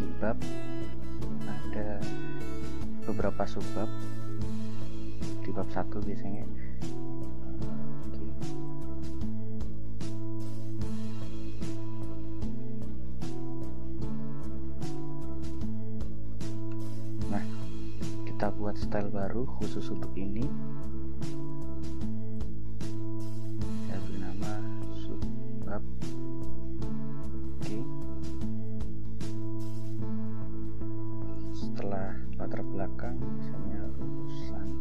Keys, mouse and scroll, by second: 0.8 click, 2.2 click, 6.4 click, 7.7 click, 8.7 click, 10.5 click, 14.0-17.4 typing, 18.9 click, 21.5 click, 22.5 click, 24.2-26.4 typing, 27.6 click, 28.3-28.8 scroll down 2, 30.7 click, 31.9 Return, 33.4-34.8 typing.